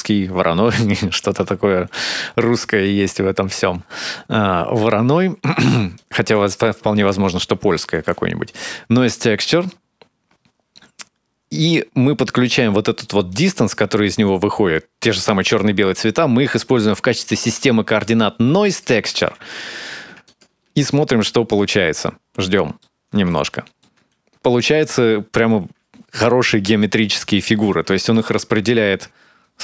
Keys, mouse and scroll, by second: 1.1 click, 2.2-2.9 scroll down 3, 2.6 middle click, 3.1-3.4 scroll up 1, 3.4-4.2 scroll down 1, 5.8 click, 6.8 click, 7.8 shift+d, 9.2 click, 13.1 click, 16.2 click, 18.5 click, 20.1 ctrl+shift+click, 20.2 ctrl+shift+click, 22.6 middle click, 23.3 shift+middle click, 23.8-24.2 scroll up 2, 24.3-24.6 scroll down 3, 26.8 scroll up 2, 27.9 ctrl+shift+click.